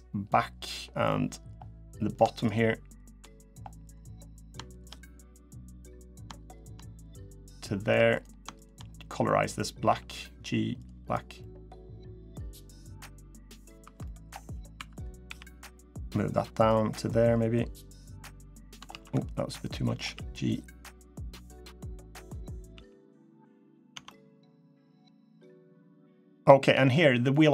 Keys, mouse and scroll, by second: 0.8 middle click, 1.8 click, 2.1 shift+click, 2.7 click, 3.1 middle click, 3.6 click, 4.4 shift+click, 5.3 click, 5.8 click, 6.0 shift+click, 6.3 shift+click, 6.8 click, 7.7 3, 7.9 click, 8.3 shift+click, 9.6 g, 10.8 click, 11.1 middle click, 12.4 middle click, 13.1 middle click, 13.3 scroll down 1, 13.6 2, 13.8 middle click, 14.1-14.5 scroll up 1, 14.5 2, 14.7 click, 15.0 g, 16.6 scroll down 2, 16.9 middle click, 17.7 scroll up 1, 18.0 middle click, 18.5 scroll up 1, 18.6 ctrl+z, 18.9 middle click, 19.8 g, 20.9 middle click, 22.5 g, 23.4 scroll down 3, 23.7 Tab, 23.8 middle click, 24.5 middle click, 24.9 scroll down 1, 25.2 middle click, 25.6 scroll up 2, 26.1 middle click, 26.5 Tab, 26.6 scroll up 1, 27.0 middle click.